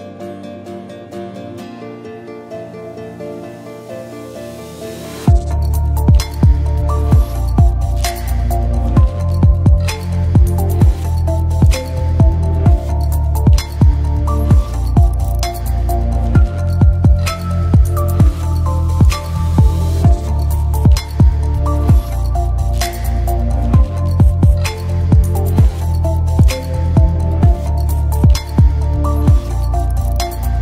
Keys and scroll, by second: 3.6-5.2 typing, 7.4-9.4 typing, 15.0 space, 23.2 5, 23.6 0, 23.7 Return, 30.1 Return, 30.3-30.6 typing.